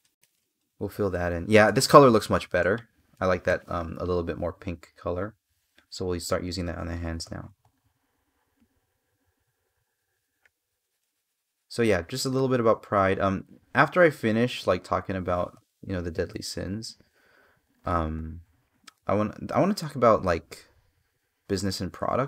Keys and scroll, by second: 2.9 space, 7.0 space, 15.4 space.